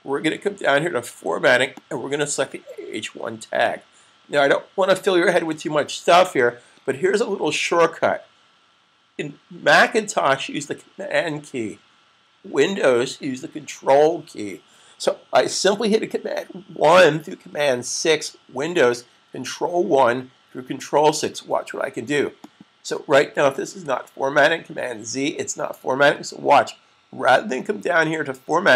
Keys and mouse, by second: 1.7 click, 5.4 super+s, 22.3 click, 23.7 super+z.